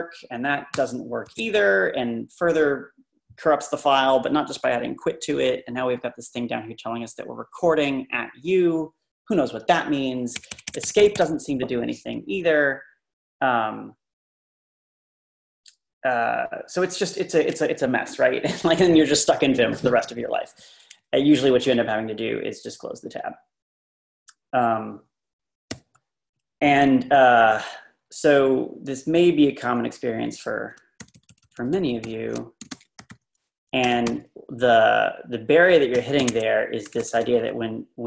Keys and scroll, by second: 0.8 Return, 1.2 Escape, 10.3 Escape, 10.5 Escape, 10.7 Escape, 10.8 Escape, 11.0 Escape, 11.1 Escape, 12.4 typing, 25.8 super+t, 32.4-34.6 typing, 35.7-38.0 typing.